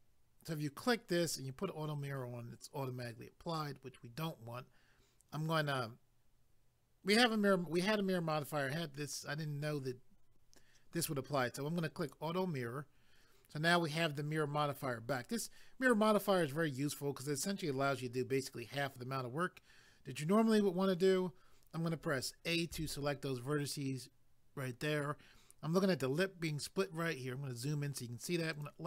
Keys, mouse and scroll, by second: 12.0 click, 27.2-27.5 scroll up 1, 28.5 click.